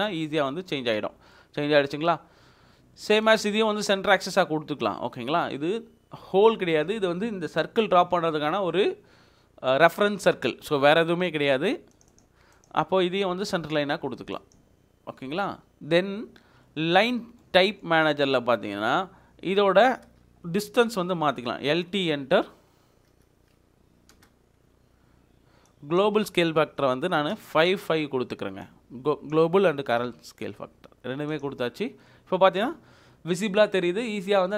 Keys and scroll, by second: 15.2 Escape, 15.5 Escape, 20.6-24.1 typing, 27.3 5.